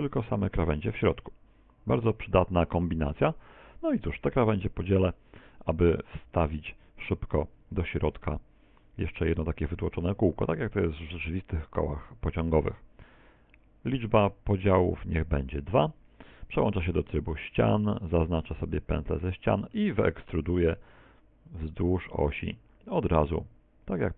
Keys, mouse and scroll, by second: 5.0 w, 7.6 t, 14.6 click, 16.4 ctrl+Tab, 18.2 alt+shift+right click, 19.2 middle click, 21.0 e.